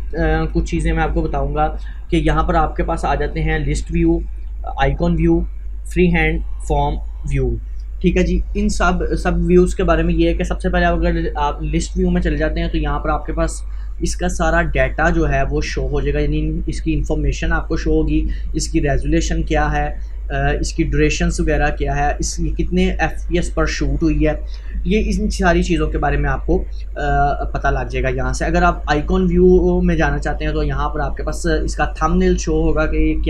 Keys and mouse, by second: 10.5 click, 14.5-25.5 drag, 27.3-32.1 drag.